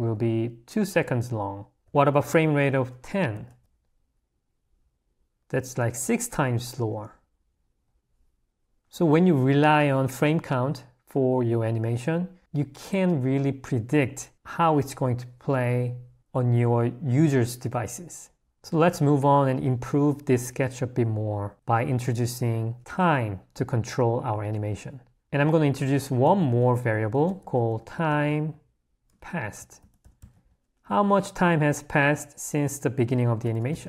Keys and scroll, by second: 1.8 h, 3.6 Escape, 25.2 space, 26.4 0, 33.0 o.